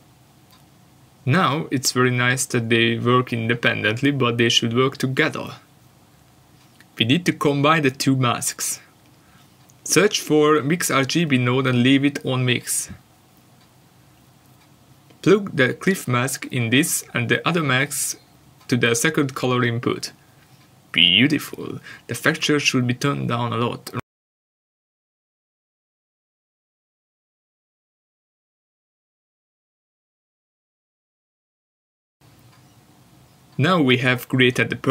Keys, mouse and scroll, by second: 0.4-0.7 scroll up 1, 1.2 middle click, 2.3 shift+a, 4.9 click, 8.1 click, 8.8 click, 9.6 click, 10.5-15.8 scroll up 1, 15.8 click, 16.6-17.1 scroll down 1, 18.0 ctrl+shift+click, 19.1 middle click, 19.8 scroll up 1, 20.4 scroll down 1, 20.9 middle click, 21.7 scroll down 1, 22.0 middle click, 22.8 shift+middle click, 24.4 scroll up 1, 25.0 scroll down 1, 25.2 middle click, 25.8 scroll down 1, 26.1 middle click, 27.1 scroll up 1, 28.0-28.8 scroll down 1, 32.6 click.